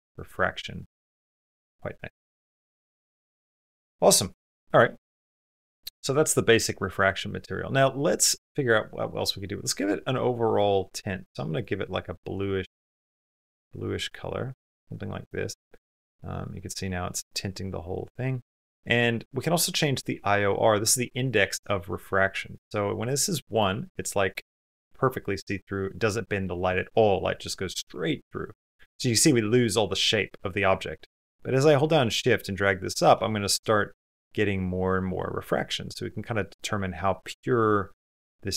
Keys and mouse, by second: 2.6 middle click, 3.4 middle click, 4.5 middle click, 4.9 middle click, 5.1 middle click, 7.1 middle click, 7.8 shift+middle click, 8.2 middle click, 8.5 click, 8.6 middle click, 9.1 click, 10.3 click, 15.6 click, 15.8 click, 16.0 click, 17.0-18.1 middle drag, 20.1-21.6 middle drag, 23.6 middle click, 25.7 middle click, 26.3 middle click, 28.1 middle click, 29.3 middle click, 31.1-32.1 shift+drag, 33.2 middle click, 34.7 middle click, 35.3-36.4 middle drag, 37.4-38.5 shift+middle drag.